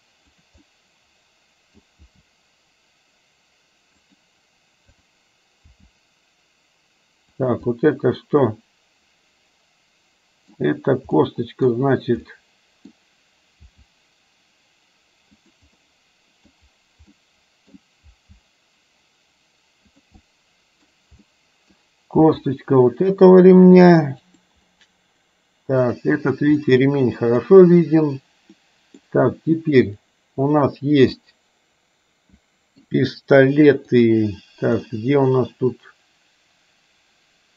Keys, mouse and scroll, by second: 0.7 scroll up 1, 0.9-1.9 middle drag, 1.9 scroll down 1, 2.1 g, 5.0 click, 5.7 g, 7.7-10.6 middle drag, 11.2 middle click, 12.4 middle click, 13.7 g, 15.9 middle click, 17.2 middle click, 18.1 g, 20.4-21.0 middle drag, 21.4-21.9 middle drag, 22.4 g, 25.9 click, 26.7-27.5 middle drag, 28.6-29.1 middle drag, 31.2-32.9 middle drag, 34.1 click, 35.0-37.5 middle drag.